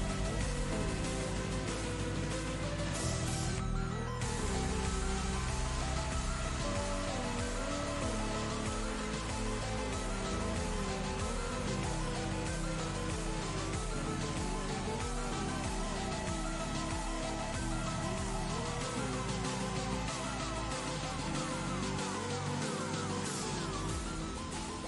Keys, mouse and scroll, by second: 3.7-4.1 click, 4.9-6.0 alt+drag, 8.0 click, 8.7 click, 9.8-10.2 typing, 11.4 Left, 12.0 Return, 12.6 v, 12.7 click, 13.3-13.9 alt+drag, 18.9 click, 19.9 click, 21.0 click, 22.0 click, 23.0 click.